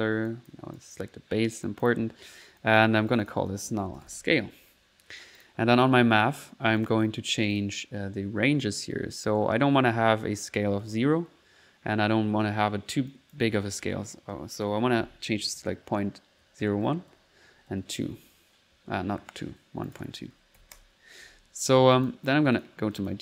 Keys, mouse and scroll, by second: 0.3 click, 0.8 click, 1.7 click, 2.1 middle click, 2.6 click, 3.0 click, 5.4 click, 6.8 click, 7.3 click, 10.5 middle click, 13.1 click, 19.9 click, 22.0 click, 22.6 click.